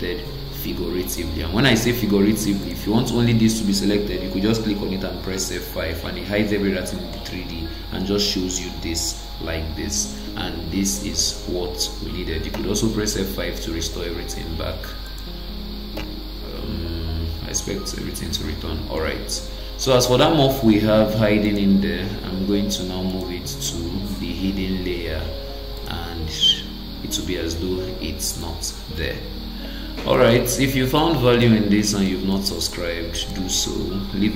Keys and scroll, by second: 5.3 F5, 12.5 F5, 16.0 F5.